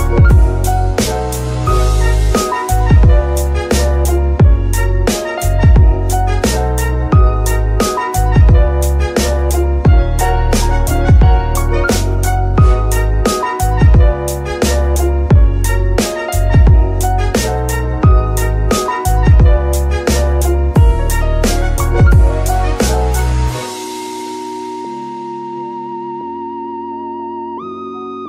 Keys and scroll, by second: 4.6-5.1 typing, 7.9 Return, 16.5 KP_3, 17.4 g, 17.6 y, 23.6 n, 28.1 KP_3.